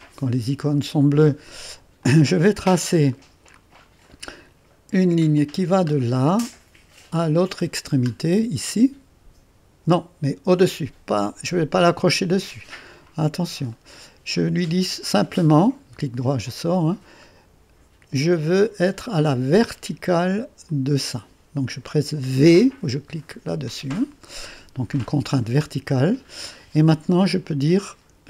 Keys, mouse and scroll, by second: 0.0 click, 2.0 click, 2.6-3.2 scroll up 2, 3.2 right click, 3.9-5.3 scroll up 2, 5.4 click, 6.4 right click, 7.3 right click, 8.1-11.3 scroll up 2, 12.9 click, 13.8 right click, 14.7 right click, 18.7 click, 19.1-22.5 drag, 22.5 v, 24.3 scroll down 1, 24.5 scroll up 1, 24.7 scroll down 1, 24.9-25.3 scroll up 1, 25.3 right click.